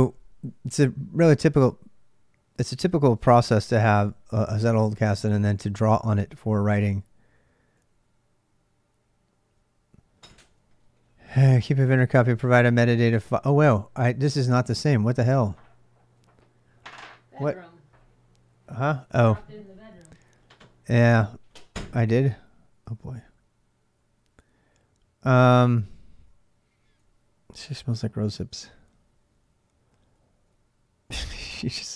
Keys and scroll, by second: 3.0 typing, 3.6 Return, 4.4 ctrl+[, 4.6-7.0 typing, 9.1-27.5 typing, 28.6-30.8 typing.